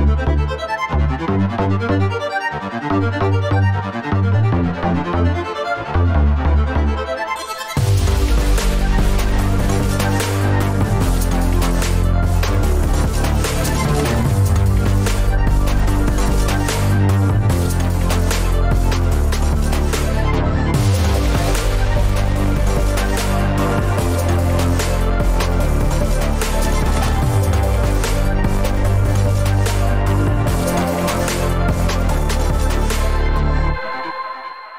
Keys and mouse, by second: 0.1 shift+drag, 1.1 alt+z, 1.3-3.0 middle drag, 3.4 middle click, 3.8 ctrl+r, 4.8 Tab, 5.3 Tab, 5.9 alt+z, 6.1 F4, 6.7 middle click, 7.4 ctrl+r, 8.4 k, 8.9 Tab, 9.6 ctrl+r, 11.3 click, 12.7 k, 13.2-14.6 shift+middle drag, 15.3 ctrl+r, 20.2 ctrl+r, 22.7 middle click, 23.0 alt+z, 23.1 alt+z, 23.4 Tab, 23.7 middle click, 23.9 Tab, 24.3 F4, 24.5 middle click, 24.7 middle click, 25.9 Tab, 25.9 3, 26.7 shift+click, 27.3 ctrl+shift+click, 27.7-28.1 middle drag, 28.7 shift+click, 29.8-31.6 middle drag, 32.0 `, 32.1 `, 32.6 alt+z, 33.3 shift+middle click, 33.9 Tab, 34.1 middle click, 34.4 Tab.